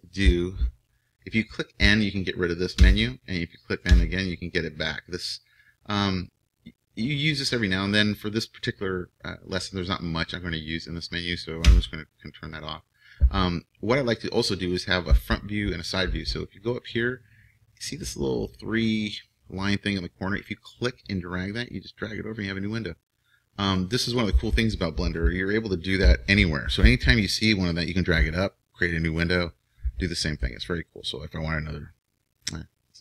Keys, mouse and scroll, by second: 2.8 n, 3.9 n, 11.6 n, 20.6-22.5 drag.